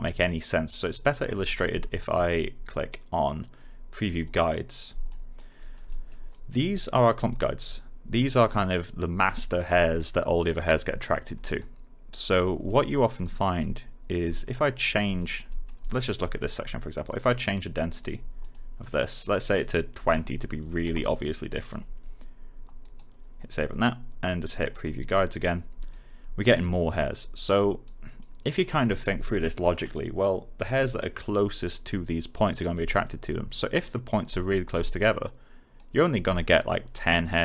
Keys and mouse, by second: 0.9 click, 1.8 alt+middle click, 4.2 click, 5.5 alt+right click, 5.8 alt+middle click, 6.2 alt+right click, 6.6 alt+middle click, 7.2-12.0 alt+drag, 12.6 alt+middle click, 13.1 alt+click, 15.1 alt+right click, 15.4 alt+middle click, 15.7 alt+right click, 17.9 click, 19.9-20.8 typing, 21.5 click, 24.6 click, 28.1 alt+right click, 33.0 alt+right click, 35.0 alt+click.